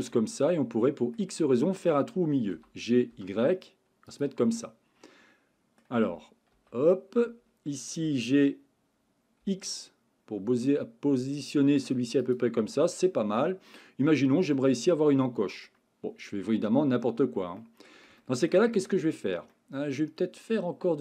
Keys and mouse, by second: 0.1-1.1 middle drag, 2.5 g, 3.1 y, 4.1 click, 4.5-5.8 middle drag, 6.5 KP_1, 8.0 g, 9.4 x, 14.5-15.7 middle drag, 17.6 middle click, 18.2-18.5 shift+middle drag, 19.5-21.0 middle drag.